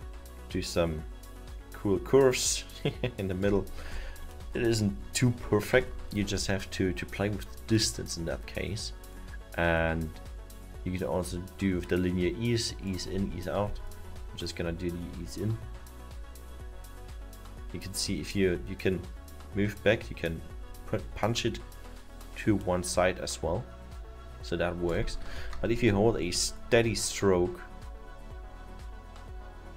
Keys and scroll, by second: 6.2 ctrl+z, 25.3 ctrl+z.